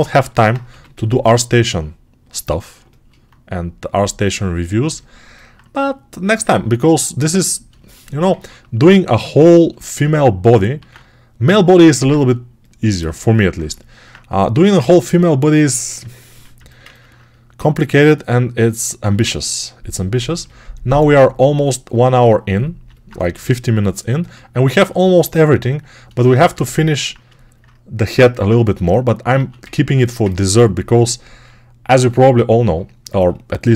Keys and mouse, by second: 0.3-9.0 alt+right drag, 0.5 g, 10.7 alt+q, 12.9-16.1 alt+right drag, 14.7 r, 16.2 r, 18.9 1, 22.7-28.7 alt+right drag, 23.2 g, 29.2 alt+q, 29.5 ctrl+alt+right click, 30.8 g.